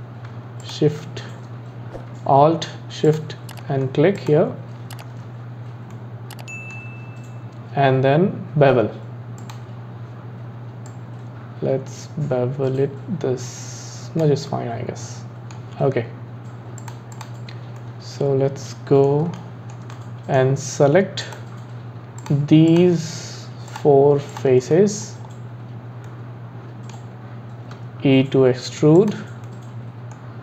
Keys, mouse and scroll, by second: 0.7 shift+click, 3.1 click, 4.2 click, 5.9-9.1 middle drag, 9.4-11.0 drag, 14.5-16.8 middle drag, 16.8 click, 17.8-21.2 middle drag, 21.2 click, 22.2 click, 22.7 shift+click, 23.7 shift+click, 24.3 shift+click, 24.7 middle click, 25.3-26.1 scroll up 3, 26.1-27.8 middle drag, 27.8 e, 29.5-30.4 middle drag.